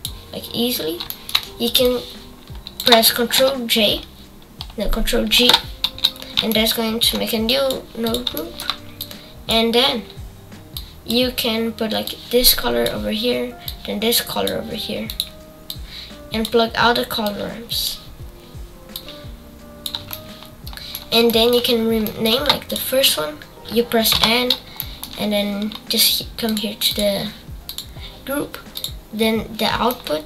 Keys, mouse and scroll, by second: 5.9 ctrl+g, 8.0-11.0 drag, 12.0-13.5 drag, 13.6 click, 17.2-18.5 drag, 18.9-20.5 drag, 20.6-22.6 shift+middle drag, 22.6-24.1 drag, 24.1 n, 28.7 click.